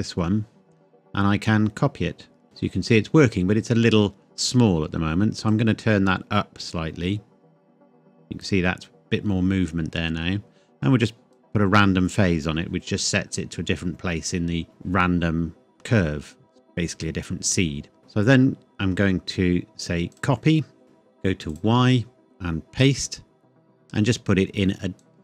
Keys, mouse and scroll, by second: 2.4-3.0 scroll up 1, 4.5-5.5 scroll down 1, 5.5 click, 11.0 click, 12.9-14.6 scroll down 1, 15.4-16.3 scroll down 1, 16.3-18.0 scroll up 1, 20.1 click.